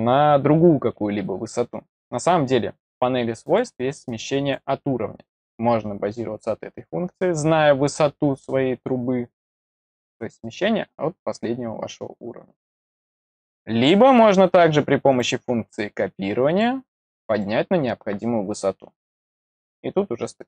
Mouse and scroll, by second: 3.4 click, 4.0 click, 15.0 click, 16.4 click, 17.2 click, 19.5-20.4 middle drag.